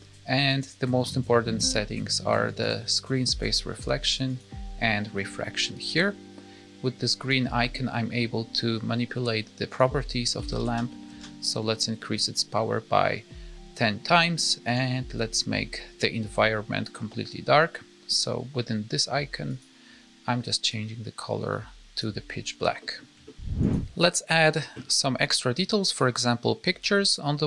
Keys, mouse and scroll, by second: 0.5 click, 2.5 click, 4.8 click, 5.8 click, 7.1 click, 9.6 click, 10.6 KP_0, 14.6 click, 15.5-16.9 scroll down 1, 16.9-17.6 scroll down 2, 19.5 click, 22.8 middle click, 23.2 shift+middle click, 23.3 middle click, 23.7 click.